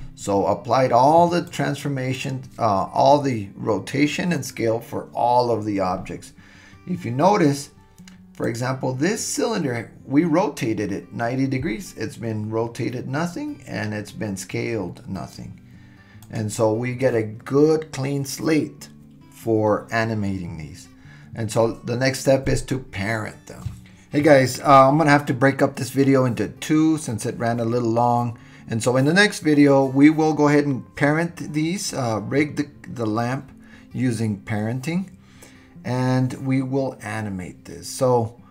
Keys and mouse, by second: 1.4 click, 2.2 click, 8.4 click, 16.2 click, 25.8 KP_1, 28.4-29.0 shift+middle drag, 29.7-32.2 drag.